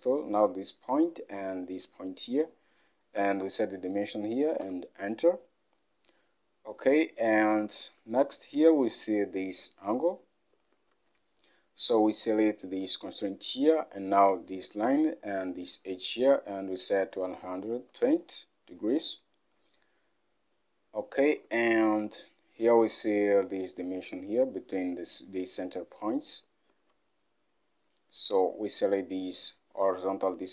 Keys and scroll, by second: 3.3-3.6 typing, 4.7 Return, 7.9 alt+Tab, 17.0-17.4 typing, 18.0 Return, 21.5 alt+Tab.